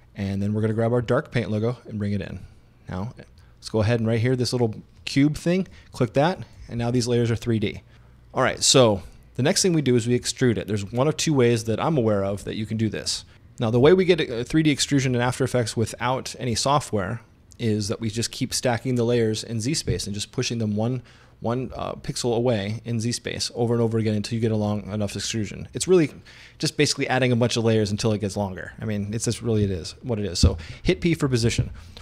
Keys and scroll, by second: 30.5 p.